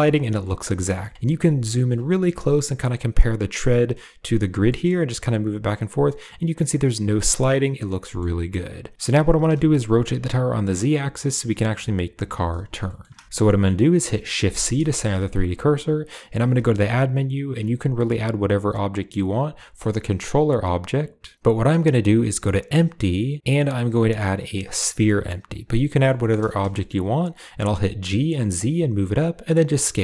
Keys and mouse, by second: 0.2 g, 0.9 shift+middle drag, 1.5 shift+middle drag, 4.4 g, 7.8 g, 9.0 r, 12.7 shift+middle drag, 13.7 middle click, 14.2 shift+c, 14.7 shift+middle drag, 15.0 middle click, 16.3 shift+a, 25.6-25.9 middle drag, 26.1 shift+middle click, 26.6 shift+middle click, 27.9 g, 29.4 s.